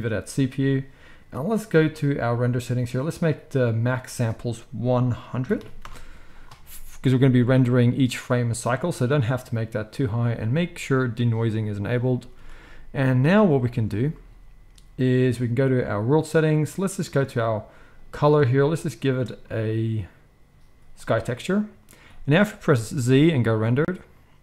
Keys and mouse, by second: 5.5 0, 12.2 ctrl+s, 12.4 ctrl+s, 16.2-17.9 middle drag, 17.9-24.4 drag, 22.7 z.